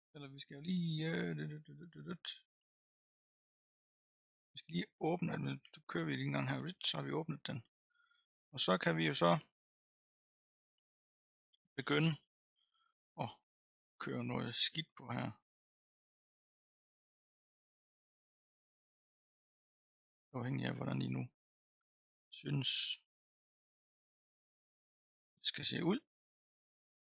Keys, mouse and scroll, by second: 6.0-8.9 drag, 8.9-15.0 middle drag, 15.0-15.7 scroll down 1, 15.7-21.0 drag, 21.0-22.4 middle drag, 22.4-24.0 drag, 24.0-25.5 middle drag, 25.5 click, 25.9 middle click, 26.8-27.1 drag.